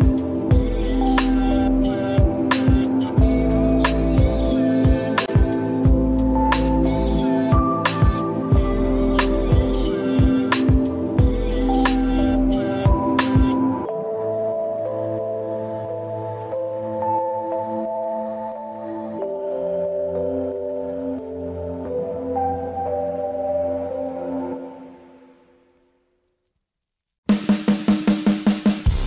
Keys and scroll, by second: 3.7 ctrl+u.